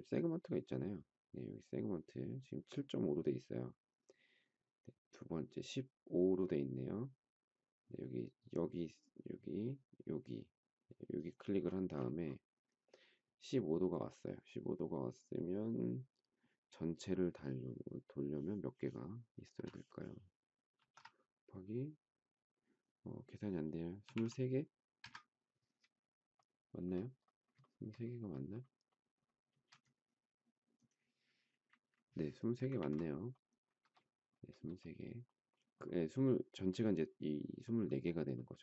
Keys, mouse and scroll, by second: 20.7 shift+8, 23.8 typing, 24.9 Return, 24.9 typing, 27.6 shift+middle click, 27.7 shift+double middle click, 29.4 space, 31.4 Delete, 32.7 ctrl+z.